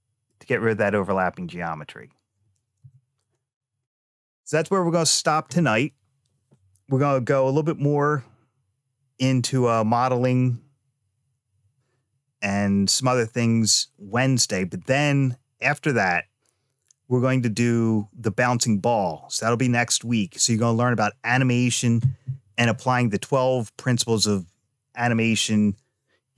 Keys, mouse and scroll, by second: 0.4-1.1 scroll up 3, 2.6 Tab, 3.6 scroll down 1.